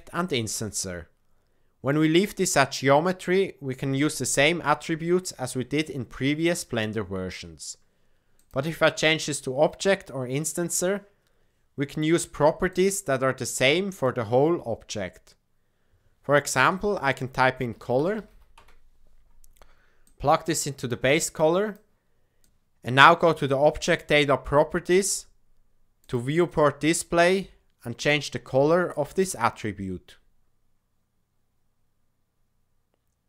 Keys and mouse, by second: 8.3-12.8 drag, 13.8-19.2 drag, 20.1-20.9 drag, 21.3 click, 23.8 click, 25.9 click.